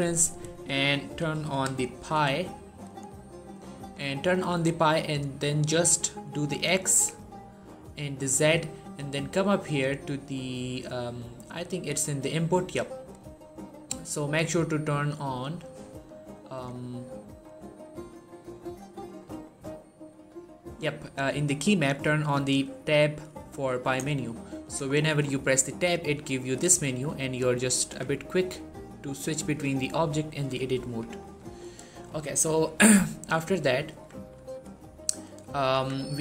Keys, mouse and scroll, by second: 1.0-2.0 typing, 2.7 click, 4.8-6.4 scroll down 1, 9.5 click, 10.4-11.3 scroll up 1, 11.3 click, 16.4 click, 24.5 click, 24.8 middle click, 25.2 Tab, 31.6 middle click, 32.0 shift+middle click, 32.3-33.2 scroll up 1, 33.4 shift+middle click, 33.7 Tab, 34.2 1, 35.3 shift+middle click, 35.6 Tab, 36.1 g.